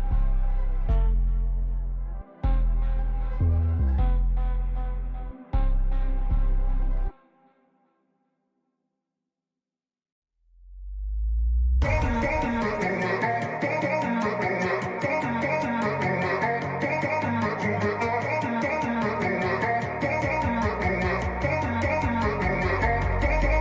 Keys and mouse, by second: 0.2 right click, 1.6-3.7 drag, 11.8 click, 15.6 click, 17.8 click.